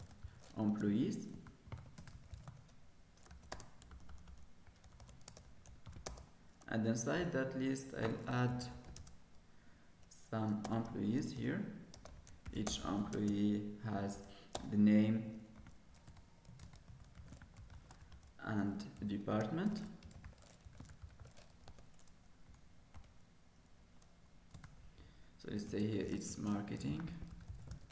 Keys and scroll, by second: 7.7 Escape, 9.9 Escape, 13.3 ctrl+space.